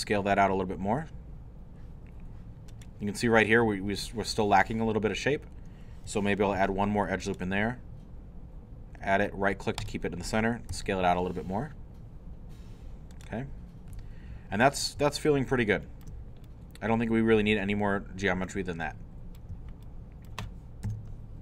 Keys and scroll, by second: 6.5 ctrl+r, 10.7 s, 20.9 shift+3.